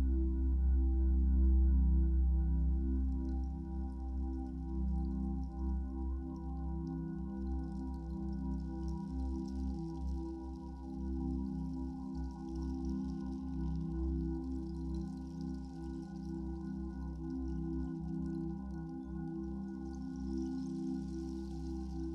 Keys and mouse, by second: 0.0 alt+click, 1.5 alt+click, 3.3 click, 4.0 Return, 5.6 click, 5.9 ctrl+alt+click, 6.5 t, 7.2 shift+click, 8.4 Return, 9.3 click, 10.2 click, 10.9 g, 11.6 click, 13.7 =.